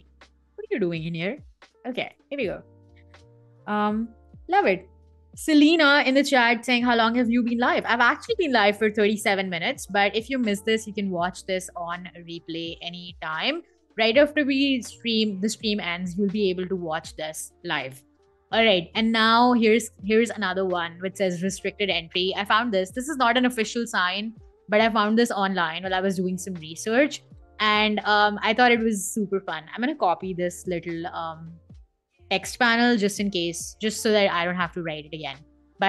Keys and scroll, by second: 0.6 BackSpace, 1.0 super+f, 1.3 Escape, 27.9 super+c, 32.2 super+c, 32.5 Escape, 34.2 super+v.